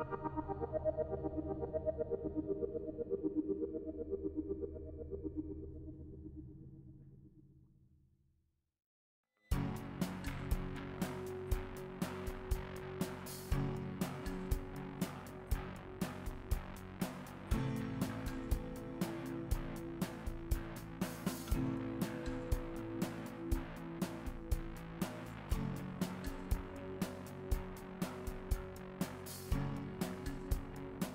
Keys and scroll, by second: 1.4 f.